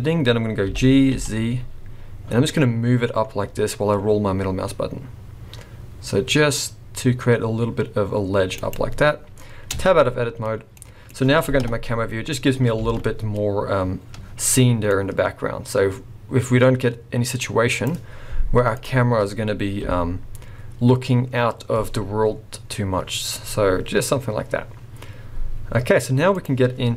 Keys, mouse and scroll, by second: 0.7 g, 10.3 Tab, 10.8 middle click, 10.8 scroll down 2, 11.6 KP_0, 12.3 scroll up 3, 12.9 alt+a, 13.3 scroll up 1, 14.9 click, 19.8 g, 26.8 scroll up 5.